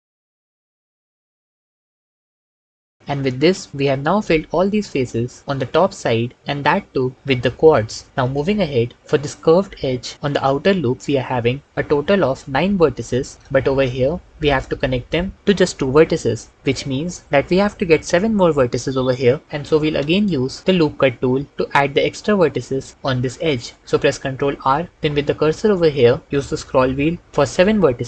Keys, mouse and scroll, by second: 0.0-2.6 typing, 1.5 ctrl+z, 1.5 ctrl+z, 2.3 ctrl+shift+z, 14.8 shift+click, 24.2 ctrl+r, 27.2 s, 27.2 KP_7.